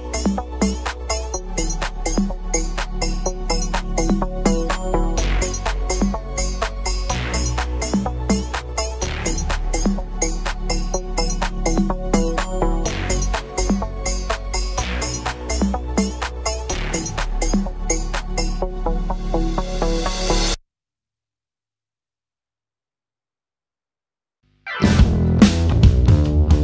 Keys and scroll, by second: 0.7 space, 2.7 m, 7.8 q, 14.7 space, 15.6 m, 20.0 m, 21.9 h, 23.8 m.